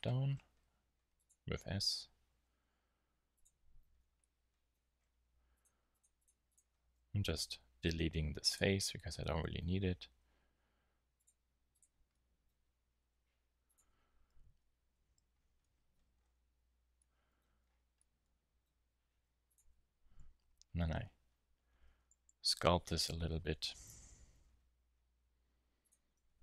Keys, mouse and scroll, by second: 0.1 middle click, 0.3 middle click, 0.6 s, 2.3 s, 3.1 click, 3.8-5.5 middle drag, 3.8 z, 5.5-8.3 drag, 6.8 x, 9.3 a, 9.6 z, 11.1 click, 13.0 s, 14.4 KP_1, 16.4 z, 17.4 z, 19.1 s, 19.5 click, 20.1 KP_3, 21.5 z, 24.2 s.